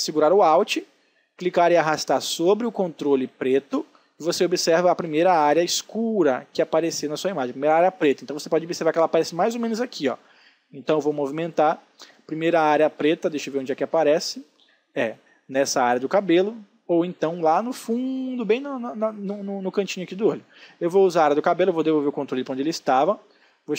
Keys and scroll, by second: 22.1 ctrl+space.